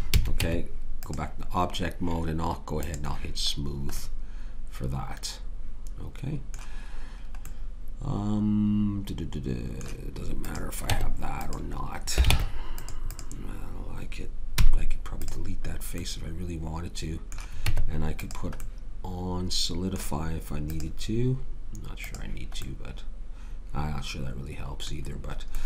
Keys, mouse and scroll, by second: 0.1 a, 0.3 Tab, 2.8-4.6 drag, 10.9 Tab, 12.3 ctrl+Tab, 14.5 x, 17.6 Tab, 24.4-25.5 middle drag.